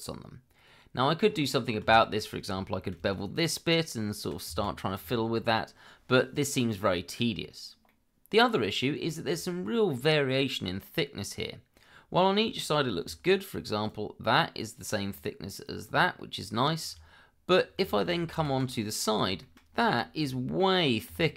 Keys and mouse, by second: 1.9 shift+middle click, 2.9 ctrl+b, 4.5 Escape, 5.0 Tab, 6.3 click, 6.7 middle click, 7.9 middle click, 9.1 shift+middle drag, 13.0 d, 13.9-15.1 drag, 15.6 click, 18.0 ctrl+z, 18.7-19.1 middle drag, 19.4 shift+middle drag, 21.1 d.